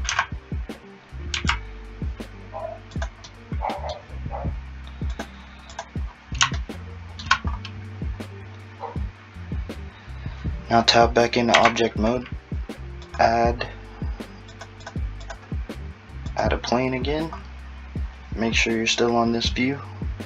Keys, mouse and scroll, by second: 3.3 middle click, 5.1 click, 5.8 click, 6.1-6.6 scroll up 3, 6.6 shift+middle click, 7.5 scroll up 2, 11.6 Tab, 13.1 click, 15.2 click, 16.4 click.